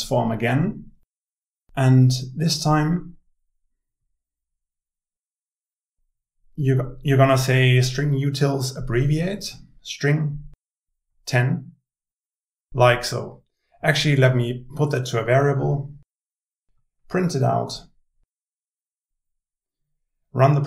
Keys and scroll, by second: 13.1 Tab, 16.4 Tab.